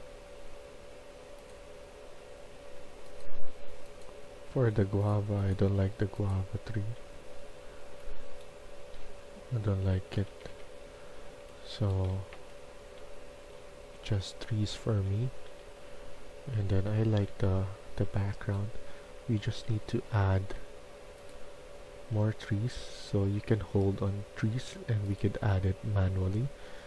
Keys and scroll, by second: 6.7-7.5 typing, 8.6-18.0 typing, 10.4 Escape, 19.3 d, 20.0 d.